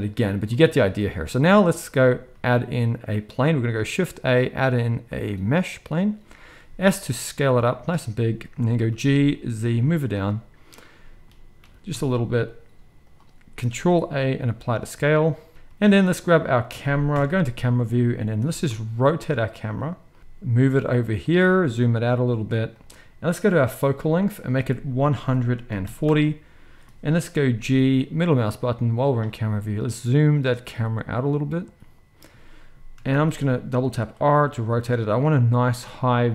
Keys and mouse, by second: 1.1 space, 3.8 shift+a, 6.2 s, 8.9 g, 11.6 g, 13.8 ctrl+a, 17.1 KP_0, 18.4 r, 20.2 g, 21.5 g, 23.6 click, 23.7 middle click, 24.5-32.1 drag, 27.5 g, 32.1-36.3 middle drag, 32.9 r, 34.4 g.